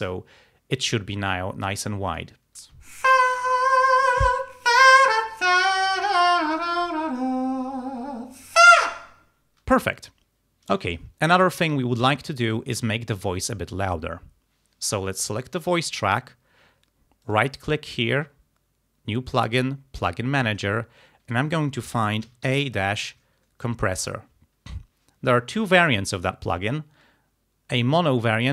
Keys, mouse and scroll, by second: 2.2 click, 2.7 space, 11.0 ctrl+scroll down 2, 11.9 ctrl+scroll up 2, 15.6 click, 17.3 right click, 20.0 click, 22.1-23.4 typing, 28.1 click.